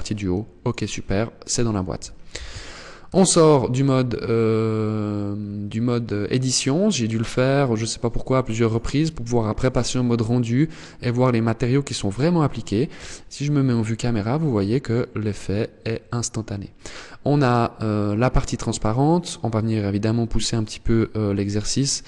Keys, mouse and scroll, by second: 0.1 click, 1.8 z, 2.5 Tab, 3.0-3.4 scroll down 5, 3.7 scroll up 3, 4.8-5.1 scroll down 2, 5.3 scroll up 2, 5.9 scroll up 3, 6.3 scroll down 1, 8.1 click, 12.2 KP_0, 14.9 scroll up 1.